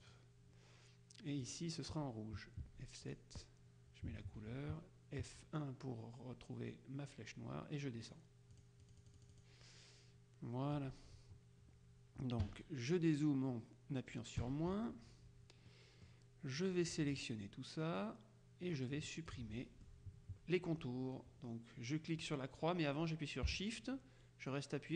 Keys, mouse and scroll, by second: 0.1 click, 1.5 click, 2.7 F7, 3.1 click, 4.5 F1, 8.1 click, 12.5 KP_Subtract, 14.4 KP_Subtract, 15.8 middle click, 18.1-19.9 drag.